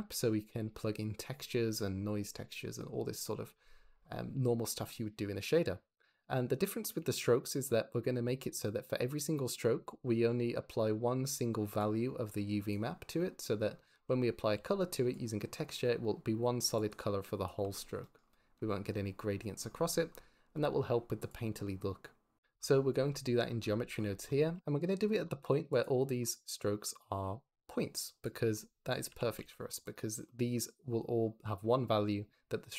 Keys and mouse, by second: 4.7 click, 6.9 shift+middle drag, 7.5 click, 8.1 shift+middle click, 9.6-13.9 d, 10.2 click, 14.4-17.5 d, 15.0 click, 16.8 click, 17.8 drag, 21.2 click, 25.7 ctrl+shift+click, 29.0 g, 29.3 x.